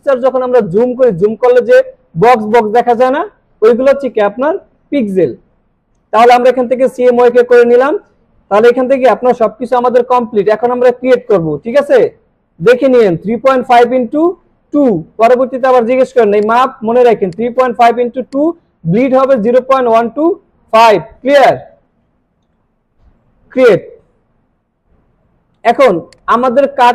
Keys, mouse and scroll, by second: 13.0-13.6 drag, 16.4 click, 23.6 click, 25.7 alt+scroll down 1, 26.1 space, 26.3-26.9 click, 26.5 space.